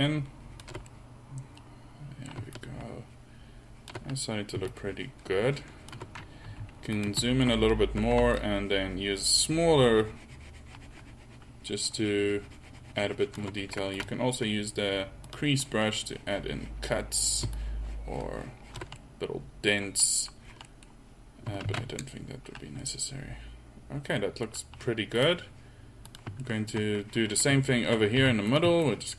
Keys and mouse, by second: 2.6-4.2 middle drag, 6.5 f, 22.3 ctrl+z, 24.5 middle click, 26.5-27.0 drag, 28.2 f, 28.9-29.1 drag.